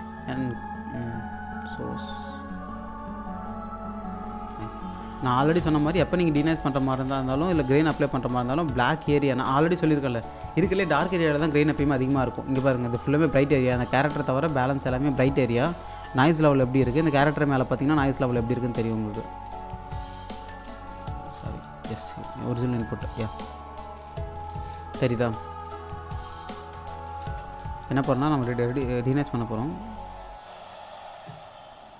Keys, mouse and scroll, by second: 0.9-1.3 scroll up 1, 1.3-4.8 drag, 5.0 1, 5.4-6.3 scroll down 1, 6.3-7.0 scroll up 1, 7.0 space, 7.7-10.3 alt+drag, 10.5-11.3 scroll up 1, 12.2 scroll down 1, 12.3-14.7 alt+drag, 15.8-16.3 scroll up 1, 16.3 click, 18.1-18.8 scroll up 1, 18.9 click, 19.9 scroll down 1, 20.4 space, 21.2 click, 21.3 1, 21.8 alt+click, 23.2-23.5 scroll up 1, 23.5 click, 25.8 click, 26.7 1, 27.2 space, 27.4 scroll down 1, 27.9-31.7 alt+drag.